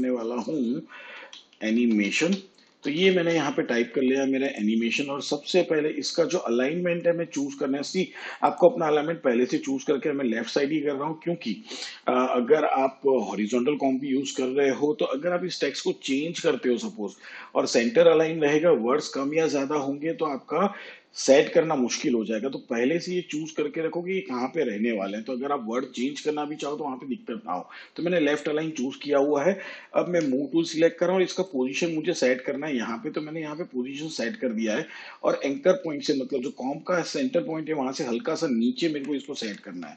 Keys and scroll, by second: 1.1-2.9 typing, 30.0 v, 38.9 Up.